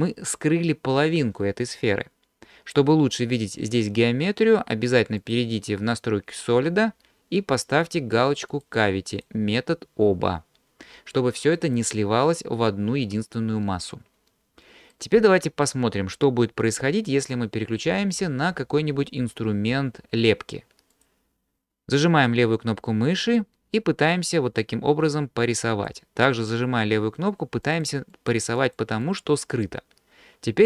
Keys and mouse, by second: 5.2-6.5 drag, 7.7-10.0 drag, 14.9 middle click, 15.2-17.3 drag, 15.2-16.8 right drag, 21.0 click, 23.4-25.9 drag, 27.7 click, 28.1 click, 28.7 click, 29.1 click, 29.5 click.